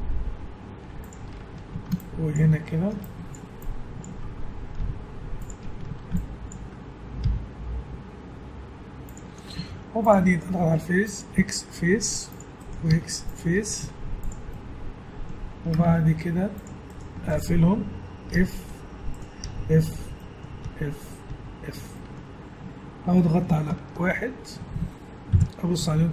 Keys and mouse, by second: 1.5 a, 4.8 g, 5.8 a, 7.2 g, 9.6 ctrl+Tab, 10.6 z, 11.3 x, 12.6 right click, 12.9 x, 13.7 z, 13.8-15.5 middle drag, 15.8 ctrl+Tab, 16.9-19.0 right drag, 18.3 f, 19.2 right click, 19.4 f, 20.6 f, 21.3 f, 22.5 Tab, 23.8 ctrl+1, 25.3 KP_1, 25.8 z.